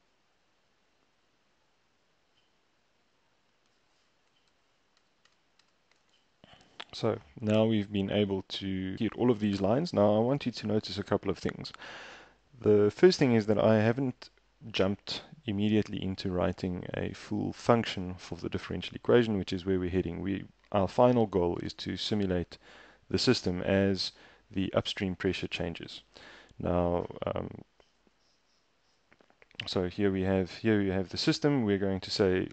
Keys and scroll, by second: 5.0 shift+Return, 5.3 shift+Return, 5.7 shift+Return, 28.0 super+Tab.